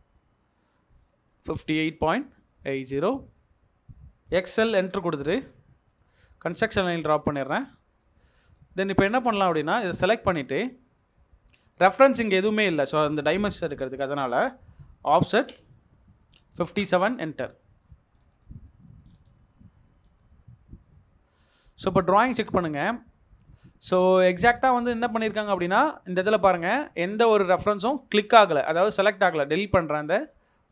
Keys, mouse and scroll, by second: 1.3 middle click, 1.7 space, 2.1 scroll, 2.2-2.9 scroll up 1, 4.2 Escape, 4.2-4.7 typing, 6.6 Escape, 8.5-8.9 scroll down 1, 8.9 Escape, 9.8 double click, 12.0 middle click, 12.3-12.7 scroll down 1, 15.1-17.3 typing, 15.4 Return, 18.1-18.4 scroll up 1, 19.0 scroll up 1, 19.1-19.4 scroll down 1, 19.4 middle click, 20.0 scroll up 1, 20.8 Escape, 23.4-23.7 scroll up 1.